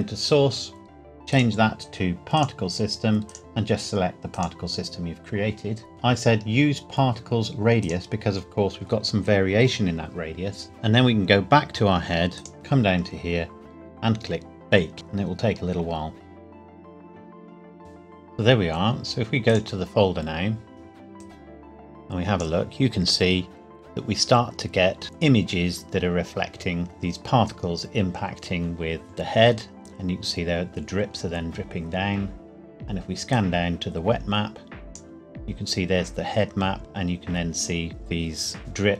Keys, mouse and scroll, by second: 1.3 click, 7.8 click, 12.4 click, 12.5 scroll down 1, 16.3 click, 17.8 click, 19.5 click, 21.2 click, 21.5 click, 25.7 scroll down 1, 26.6 scroll down 1, 27.4-27.8 scroll down 1, 33.3 click, 36.6 scroll down 1, 38.0 scroll down 1.